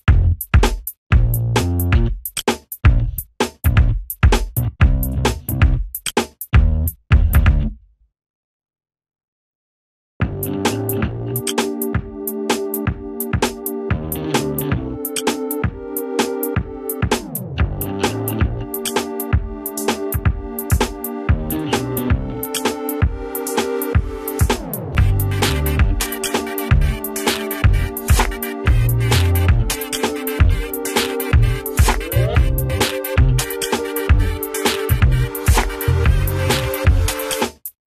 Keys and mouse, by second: 5.8 ctrl+space, 8.2-9.6 drag, 9.6 ctrl+right click, 10.8 ctrl+r, 11.4 ctrl+z, 11.7 alt+click, 13.2 ctrl+right click, 13.7-15.9 alt+drag, 15.9 ctrl+z, 16.8-18.5 alt+drag, 18.5 Up, 19.4 alt+click, 20.0 Right, 21.0-22.9 drag, 22.9 Up, 23.9 click, 24.7 Down, 26.9 click, 35.4 right click, 36.2-37.9 drag.